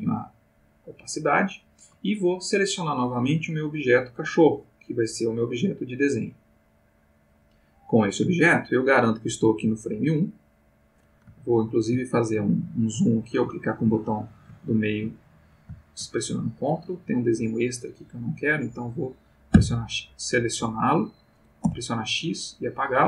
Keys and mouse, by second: 3.9 click, 9.2-11.1 drag, 11.5-12.7 ctrl+middle drag, 12.8 middle click, 13.6 ctrl+middle click, 14.6 ctrl+middle click, 16.5 click, 17.2-18.6 drag, 19.5 x, 20.7 click, 21.6 x, 22.5 click.